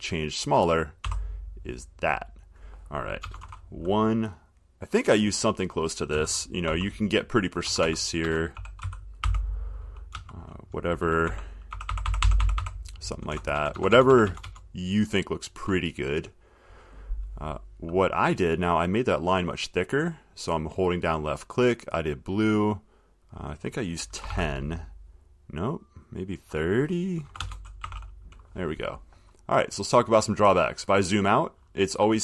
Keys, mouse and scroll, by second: 0.7 click, 1.2 2, 3.4 BackSpace, 3.6 1, 6.3-8.0 typing, 10.3 BackSpace, 11.5-13.7 typing, 20.1 click, 21.3 click, 22.0 click, 23.5 click, 24.2-25.0 typing, 27.4 BackSpace, 27.6 BackSpace, 30.2 click, 30.5 middle click, 30.6 middle click.